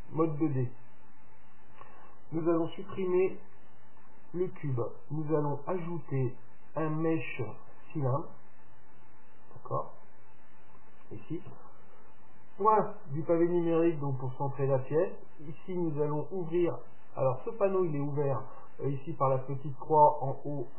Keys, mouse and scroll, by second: 0.4-2.8 middle drag, 3.2 x, 9.4-12.4 middle drag, 11.6 KP_Decimal, 16.0 click, 17.0 click.